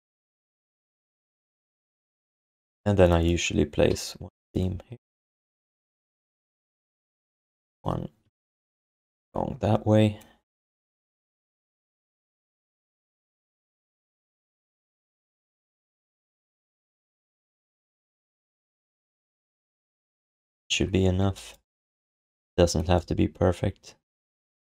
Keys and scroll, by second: 3.9 s, 6.2 q, 9.0 s, 11.8 s.